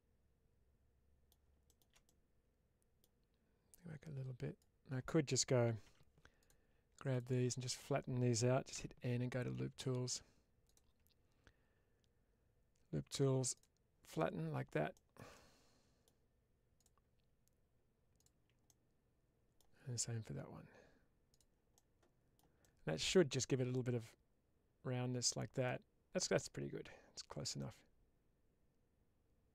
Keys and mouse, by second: 1.9 middle click, 3.6 click, 5.7 3, 8.6 n, 10.5 click, 13.4 click, 14.1 middle click, 15.3 middle click, 18.6 middle click, 21.2 click, 21.6 middle click, 22.7 shift+middle click, 24.6 Tab, 25.5-26.2 middle drag, 27.5-29.5 middle drag.